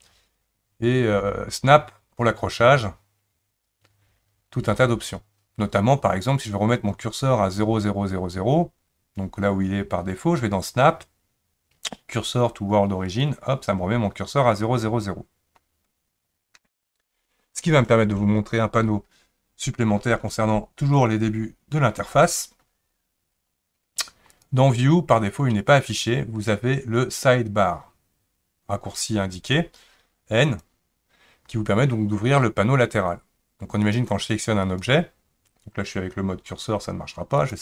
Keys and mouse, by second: 24.3-26.5 drag, 26.9-30.6 drag, 33.9 click, 34.6-36.6 drag.